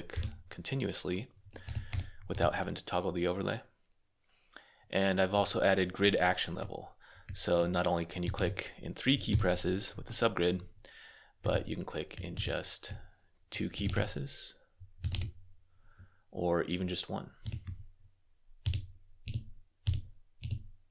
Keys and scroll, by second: 1.2-2.7 typing, 8.1 s, 8.3 p, 9.2 r, 10.9-12.2 typing, 13.4-15.4 typing, 16.9-20.9 typing.